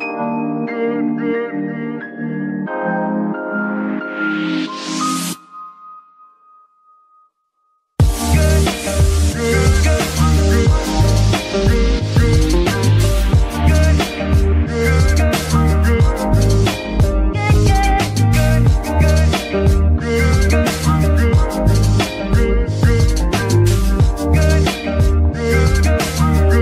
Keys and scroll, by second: 1.9 KP_Decimal, 2.9 z, 14.0 ctrl+shift+s, 14.5 z, 17.0 z.